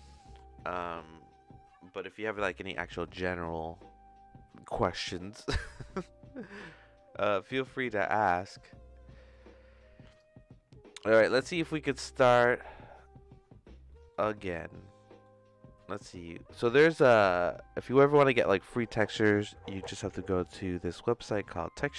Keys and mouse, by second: 9.2 middle click, 10.1 click, 11.1 middle click, 12.0 middle click, 13.9 middle click, 14.9 middle click.